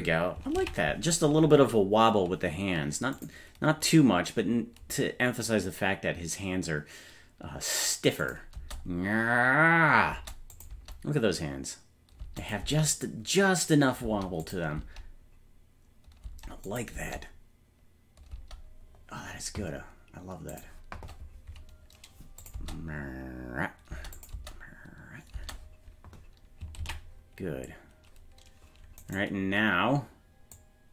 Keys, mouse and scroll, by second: 0.8 ctrl+s, 3.2 click, 8.3 click, 8.6 space, 10.1 space, 10.6 click, 10.7 space, 12.2 space, 12.4 click, 12.7 space, 14.1 space, 14.5 click, 14.8 space, 16.3 space, 16.7 click, 17.0 space, 18.3 space, 20.5 click, 22.4 click, 22.6 space, 23.9 space, 24.2 click, 24.4 space, 25.4 space, 27.0 ctrl+s, 29.1-30.4 right drag, 30.6-30.9 drag.